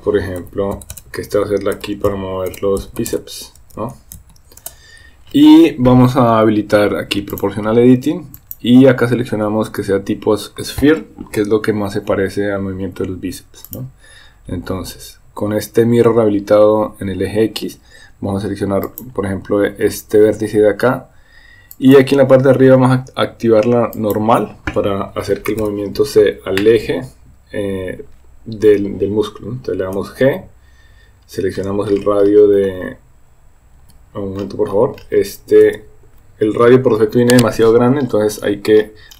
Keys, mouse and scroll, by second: 0.9 BackSpace, 7.3 click, 8.5-14.7 drag, 19.0 click, 21.9-24.5 drag, 30.0 g, 35.7 g.